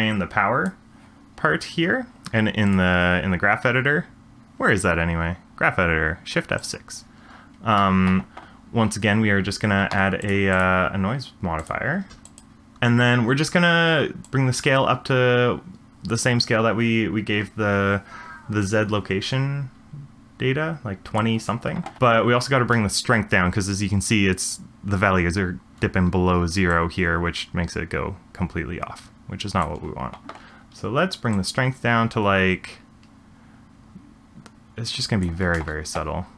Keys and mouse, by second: 0.2 click, 2.6-6.6 drag, 10.2 click, 10.6-10.9 drag, 11.5-12.4 drag, 14.3-21.2 drag, 26.7-29.6 drag, 31.4-35.2 drag, 35.5 space.